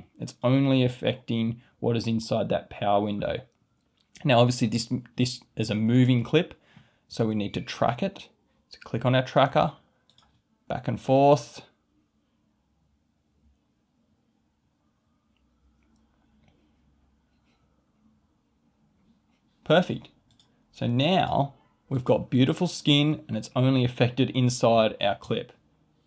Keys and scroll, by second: 25.1 space.